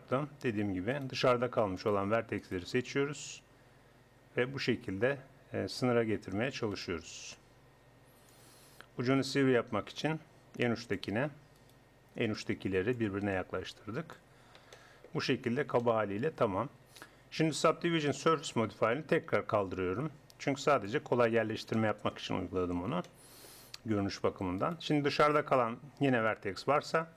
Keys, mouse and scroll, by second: 0.9-3.2 middle drag, 3.2-5.1 drag, 3.2-4.3 right drag, 6.7 click, 9.0 click, 10.9 click, 11.8 click, 13.3-17.6 drag, 17.6 Tab, 20.7-22.5 drag, 22.5 Tab, 24.6 click, 25.6 click, 26.7 g.